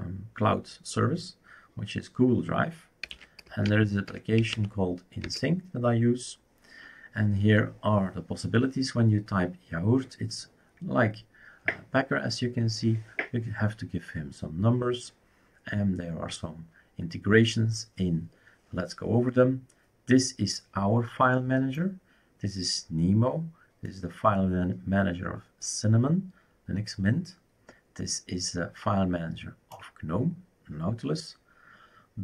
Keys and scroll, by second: 2.7-5.0 typing, 5.2 Return.